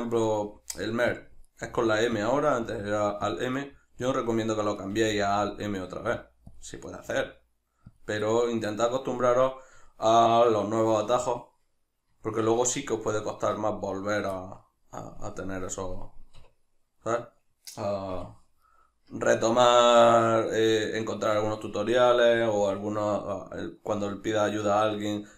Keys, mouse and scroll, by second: 0.3 right click, 0.5 g, 1.3 click, 1.5 right click, 1.7 g, 2.3 click, 2.5 right click, 2.7 g, 3.4 click, 3.6 right click, 3.7 g, 4.2 click, 4.8 right click, 5.0 g, 5.5 click, 5.8 right click, 6.0 g, 6.6 click, 6.9 right click, 7.1 g, 8.0 click, 8.3-15.4 middle drag, 15.4-16.4 drag, 16.4 \, 17.0-25.3 middle drag, 18.1 KP_Divide.